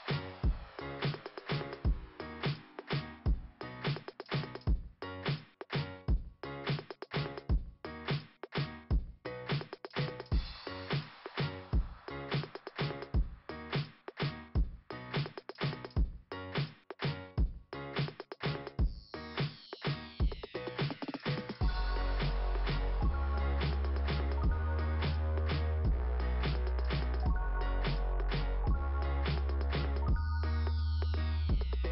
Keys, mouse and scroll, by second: 3.0 click, 3.1 click, 8.2 click, 8.3 click, 9.3 click, 9.4 click, 12.2 click, 12.4 click, 12.5 click, 12.6 click, 14.7 click, 14.8 click, 14.9 click, 17.0 click, 17.2 click, 17.3 click, 19.7 click, 19.9 click, 21.6 click, 21.7 click, 22.9 click, 24.8 click.